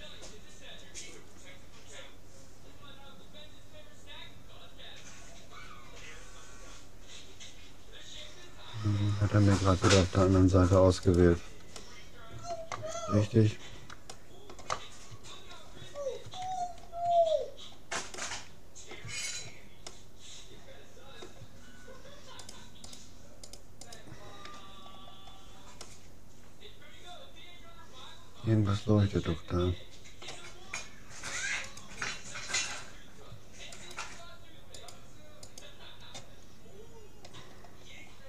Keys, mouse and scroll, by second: 11.8-13.6 middle drag, 14.1-18.0 middle drag, 18.0 scroll down 1, 18.2-19.8 middle drag, 20.0-21.6 middle drag, 22.4-25.4 right drag, 25.0-27.6 middle drag, 31.8-33.4 drag, 33.8-37.0 right drag, 37.8-38.2 middle drag.